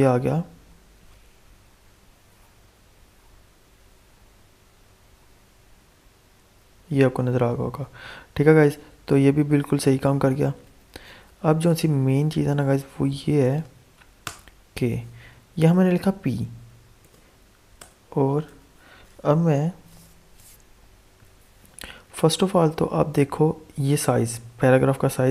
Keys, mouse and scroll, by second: 11.0 alt+Tab, 13.3 click, 14.2 Return, 15.5 p, 17.0 shift+[, 17.7 Return, 21.9 Return, 22.0 alt+Tab, 22.8 alt+Tab.